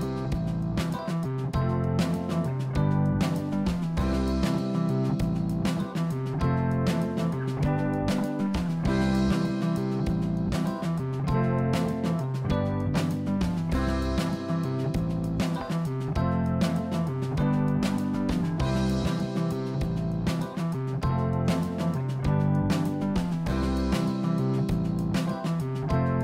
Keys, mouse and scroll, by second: 3.2 click, 4.4 g, 6.4 click, 9.9-14.2 drag, 16.5 click, 18.3 click, 19.0-19.5 scroll up 3, 19.5-21.5 drag.